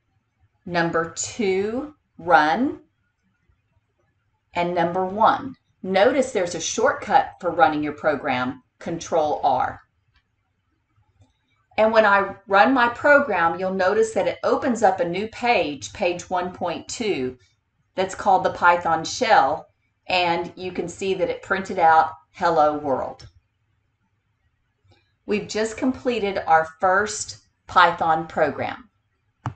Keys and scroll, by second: 1.7 2, 9.9 Return.